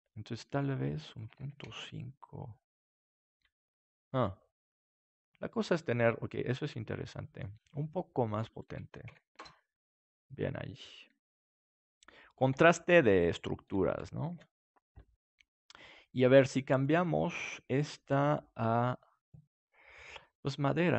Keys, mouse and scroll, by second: 0.0-3.6 drag, 3.6-6.4 middle drag, 8.5-11.5 middle drag, 11.2 s, 11.8-12.9 drag, 12.5 KP_7, 13.3 click, 14.2 ctrl+s, 15.8-19.9 drag.